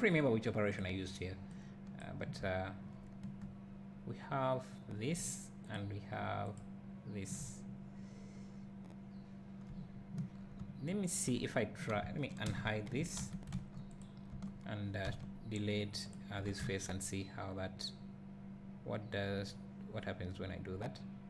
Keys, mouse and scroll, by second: 2.4 `, 7.8 `, 8.3 `, 9.2 click, 9.4 click, 10.4 scroll down 2, 10.6 `, 12.4 alt+h, 13.2 alt+a, 13.5 `, 13.7 click, 14.3 Tab, 16.1 x, 16.3 Tab.